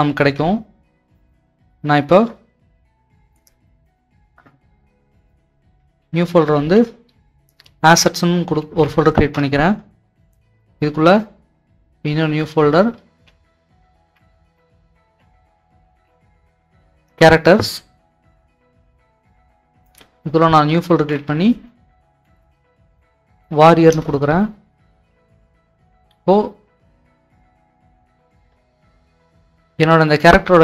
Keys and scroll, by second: 6.1-6.6 typing, 8.0-8.8 typing, 9.2 Return, 13.1 c, 14.1-16.5 typing, 17.0 Return, 19.7-23.8 typing, 23.9 Return, 25.3 alt+Tab, 25.5 typing, 29.1-29.9 typing.